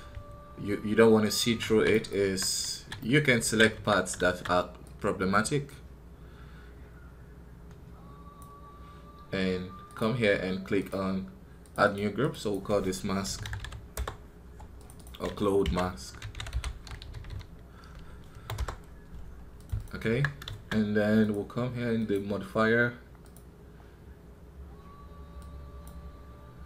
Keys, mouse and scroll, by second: 0.0 scroll up 1, 1.8-2.8 right drag, 2.8 middle click, 3.3 alt+a, 3.6 KP_1, 4.1 shift+z, 23.3-26.6 drag.